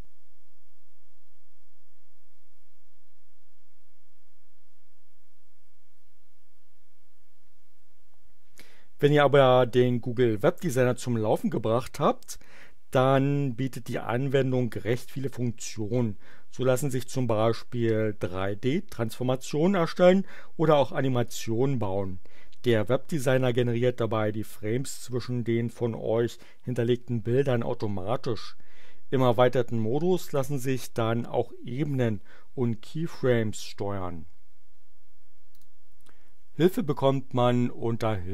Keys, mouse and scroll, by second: 35.4 click.